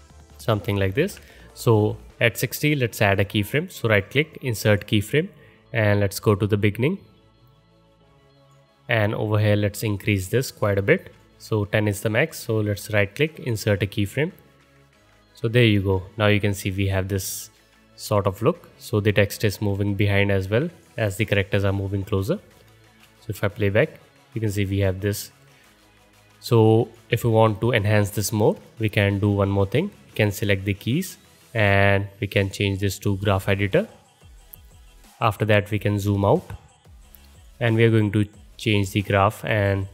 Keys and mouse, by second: 0.9 ctrl+z, 6.0-8.5 drag, 15.9-18.6 drag, 22.1 KP_0, 22.9 space, 24.3 space, 32.6-33.1 drag.